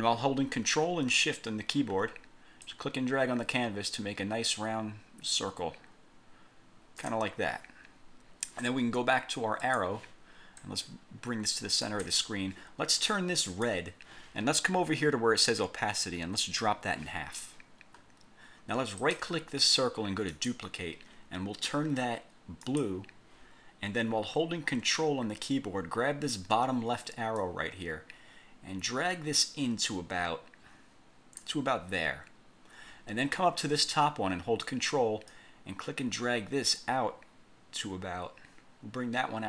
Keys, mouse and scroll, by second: 2.8-7.4 ctrl+shift+drag, 9.8 click, 10.8-12.2 drag, 13.6 click, 16.6 click, 19.1 right click, 20.4 click, 22.8 click, 27.5-31.7 ctrl+drag, 35.4-39.4 ctrl+drag.